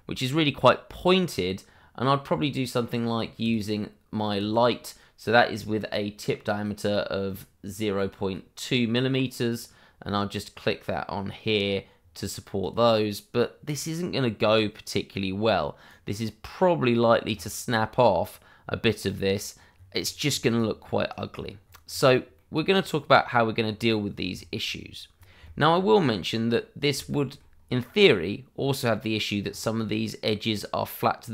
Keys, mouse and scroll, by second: 3.4 click, 9.4 click, 15.1-15.8 scroll down 1, 15.8 right click, 17.0-17.3 scroll up 1, 19.2-20.3 scroll down 1, 20.5 right click, 21.3-21.6 scroll down 1, 22.3 middle click, 22.7 right click, 24.0 scroll down 1, 27.0 shift+middle click, 27.5 scroll up 1, 27.8 right click, 29.4-29.7 scroll up 1.